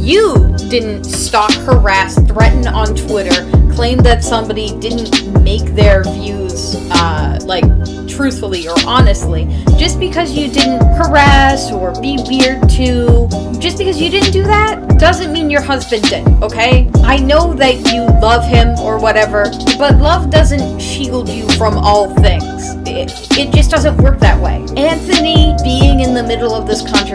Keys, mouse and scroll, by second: 1.9 [, 2.3 space, 2.9 space, 5.9 space, 6.5 space, 8.1 e, 8.6 [, 9.9 space, 10.3 space, 10.6 space, 11.1 right click, 11.4 space, 11.8 right click, 12.6-14.8 typing, 16.4 [, 17.2 space, 18.9 right click, 19.4 [, 19.7 space, 20.0 space, 22.5 space, 23.4 space, 24.4 space, 26.3 space.